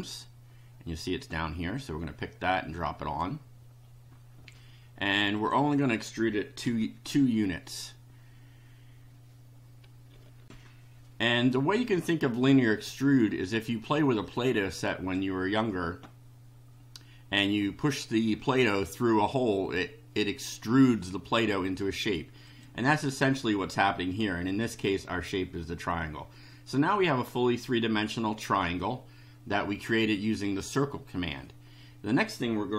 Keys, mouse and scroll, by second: 1.3-3.3 drag, 5.3 click, 6.7 2, 10.4 ctrl+r, 14.3-15.3 drag, 22.4 click.